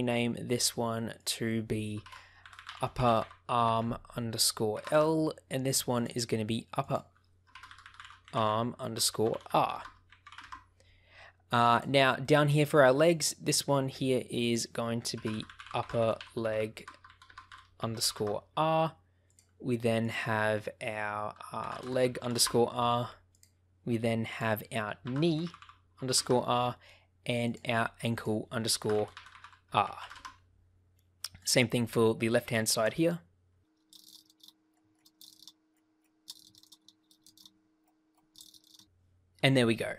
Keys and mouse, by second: 1.1-5.3 drag, 2.5 p, 5.9 click, 6.8-10.9 drag, 7.7 p, 9.6 BackSpace, 11.6 click, 12.2 shift+middle click, 13.0 click, 14.4-18.6 drag, 15.4 p, 16.8 BackSpace, 17.3 BackSpace, 19.2 click, 20.0-22.7 drag, 23.2 click, 24.2-26.6 drag, 25.5 e, 28.2-30.5 drag, 31.3 click, 32.3-34.5 drag, 34.0 p, 34.9 shift+click, 36.0-37.5 shift+drag, 36.3 e, 36.5 BackSpace, 36.8 Return, 38.1-39.3 shift+drag.